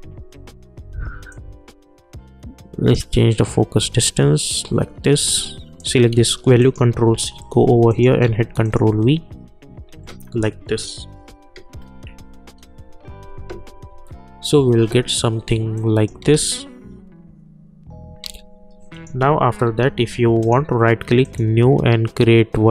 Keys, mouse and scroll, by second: 5.7 click, 6.1 ctrl+c, 6.6 click, 7.1 k, 7.9 click, 8.2 ctrl+v, 8.6 click, 12.0 k, 15.7 click, 16.2 space, 18.2 space, 18.9 click, 19.2 u, 19.6 u, 20.4 right click, 21.4 click.